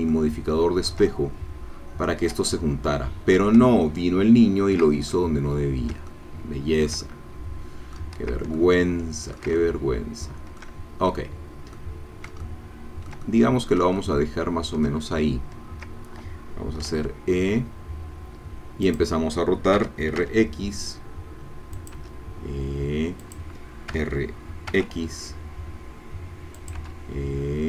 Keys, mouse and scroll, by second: 2.5 shift+middle click, 3.6-8.1 ctrl+shift+middle drag, 8.5 ctrl+middle click, 9.6-11.1 ctrl+shift+middle drag, 11.8-15.0 middle drag, 17.1 e, 18.9 click, 19.8 r, 20.2 x, 21.7 click, 21.9 e, 23.2 click, 23.9 r, 24.7 x, 26.6 click, 26.8 e.